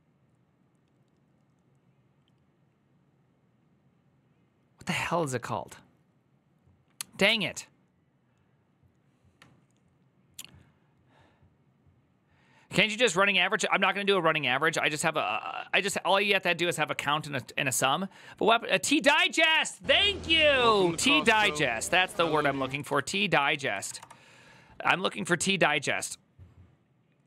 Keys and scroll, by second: 22.0 ctrl+a, 22.2-24.1 typing.